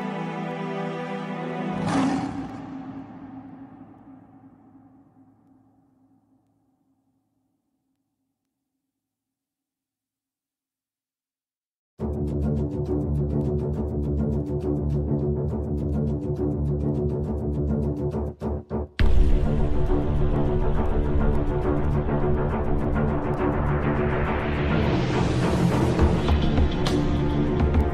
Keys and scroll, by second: 5.8 shift+Page_Up, 18.9 Delete, 20.0 shift+F2, 21.0 F9.